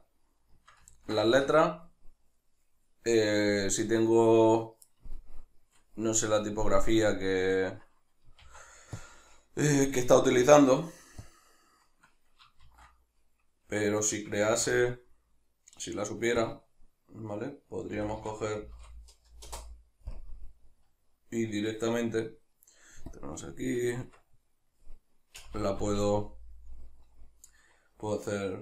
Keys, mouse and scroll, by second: 0.5-9.9 shift+middle drag, 8.4 shift+s, 9.9 right click, 10.4 shift+s, 13.7 Escape, 14.5 shift+a, 17.9 r, 20.2 KP_Decimal, 23.1 click, 24.0 Tab, 25.4 BackSpace.